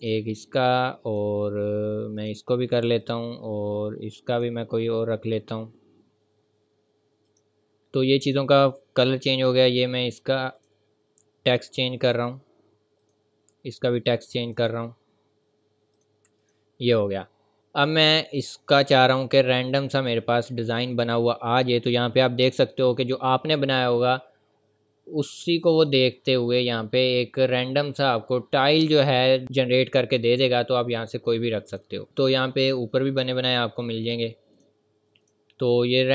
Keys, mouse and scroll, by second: 7.3 click, 24.6 scroll down 1, 28.6-29.0 scroll up 1, 31.7 click, 33.3 click.